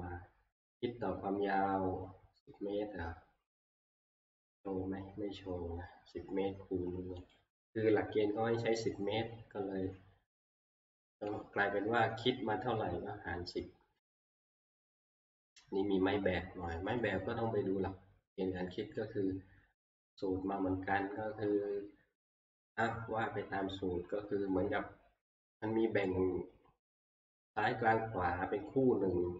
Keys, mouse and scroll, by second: 3.7 scroll, 5.6 scroll, 7.3 click, 14.1 scroll, 17.1 click, 18.7 click.